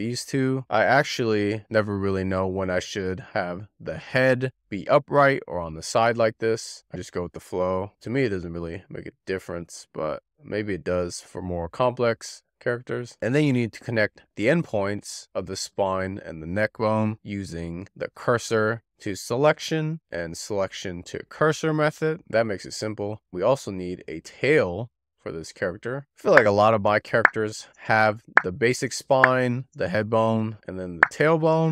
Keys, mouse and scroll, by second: 0.2 click, 2.1 click, 3.7 click, 4.2 scroll down 4, 4.3-13.0 shift+middle drag, 13.0 z, 13.6-14.0 scroll up 3, 14.4 click, 19.2 shift+s, 19.9 click, 22.4 shift+s, 22.7-23.1 scroll down 2, 23.1 scroll up 1, 23.5 click, 23.9 scroll up 1, 24.1 shift+middle click, 24.6 click, 24.9 click, 25.4 scroll up 5, 25.6 shift+middle click, 26.1 scroll down 2, 26.4 shift+middle click, 27.0 click, 27.7 click, 28.4 click, 28.7 click, 29.5 click, 29.8 click, 31.1-31.7 click, 31.4 click, 31.6-31.7 scroll.